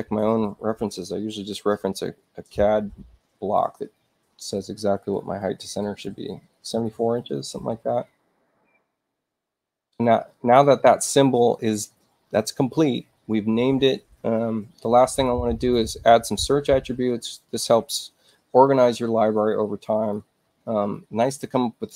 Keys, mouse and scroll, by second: 6.6 4, 6.8 Tab, 8.7 click, 10.3 click, 15.0 right click, 19.9 click, 21.3-21.9 drag.